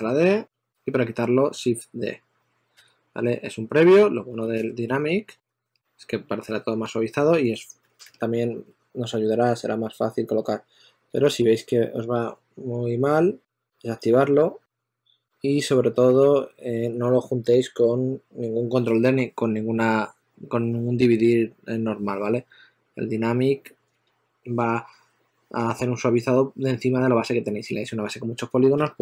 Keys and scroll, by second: 1.3 shift+d, 2.5 d, 3.6-5.8 typing, 7.4-11.3 typing, 13.1 2, 15.9 shift+f, 16.4 shift+f, 28.6 s.